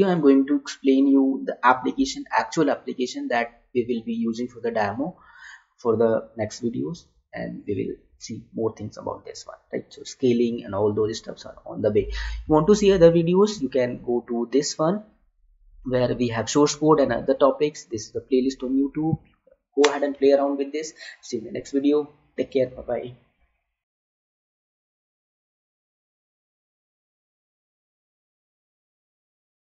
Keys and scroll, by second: 23.8 Escape.